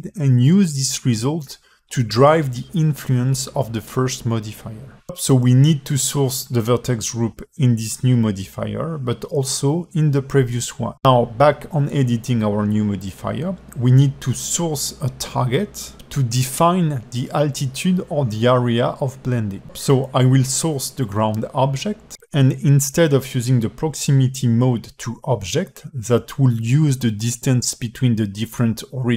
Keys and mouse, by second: 4.9-7.8 drag, 8.6 click, 11.6 click, 13.0 click, 19.3 click, 27.5-28.0 middle drag, 29.0-29.1 drag.